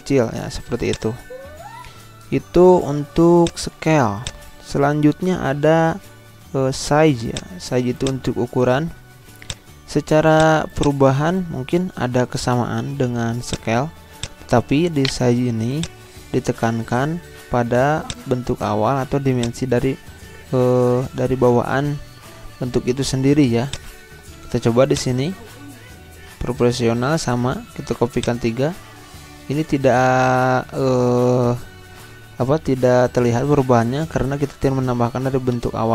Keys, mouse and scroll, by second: 1.3 z, 3.4-12.3 drag, 12.3 Delete, 13.4 click, 15.0 shift+right click, 15.4 z, 15.7-18.1 drag, 18.6 click, 19.6-22.3 drag, 23.7-27.8 drag, 28.2 click, 33.4 click, 33.5 ctrl+z.